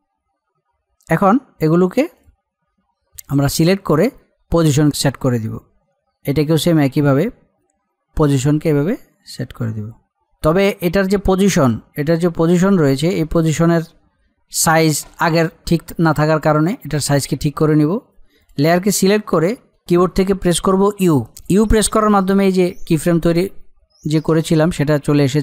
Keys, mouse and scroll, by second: 7.2-8.6 middle drag, 8.6-15.0 drag, 17.7 click, 21.4 u.